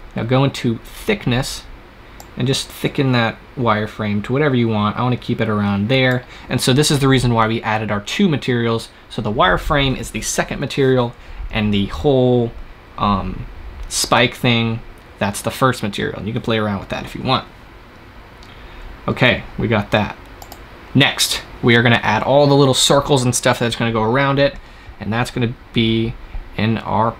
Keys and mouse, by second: 0.1-1.9 middle drag, 1.9-3.9 drag, 17.5-20.3 middle drag, 20.3-26.1 drag.